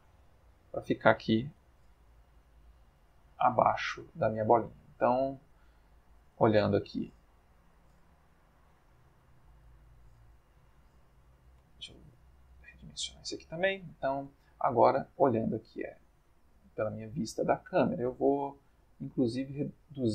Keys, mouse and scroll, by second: 1.6 g, 1.8 z, 3.2 click, 3.6 middle click, 5.4 click, 7.6 s, 7.9 z, 9.2 Escape, 9.5 click, 10.2 s, 11.0 z, 11.6 Escape, 12.0 s, 13.2 click, 14.2-15.3 ctrl+middle drag, 18.3 click, 19.5 click.